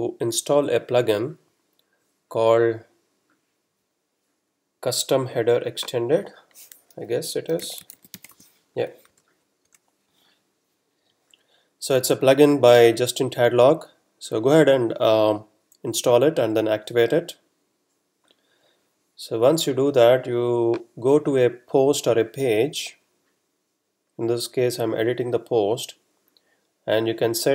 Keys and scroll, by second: 7.3-8.8 typing, 9.1 Return.